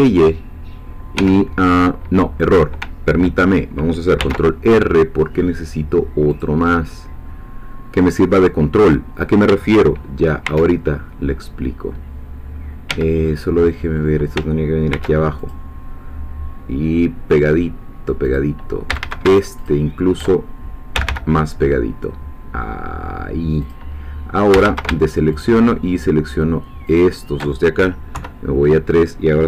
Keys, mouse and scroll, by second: 1.2 Escape, 4.2 ctrl+r, 6.3 click, 8.8 click, 10.4 ctrl+r, 12.9 Escape, 13.3-14.4 middle drag, 14.9 ctrl+r, 15.4 ctrl+click, 18.2 click, 18.9 a, 19.6 alt+shift+click, 20.9 g, 23.6 click, 24.5 a, 25.4 alt+shift+click, 27.0 alt+shift+click, 28.1 3.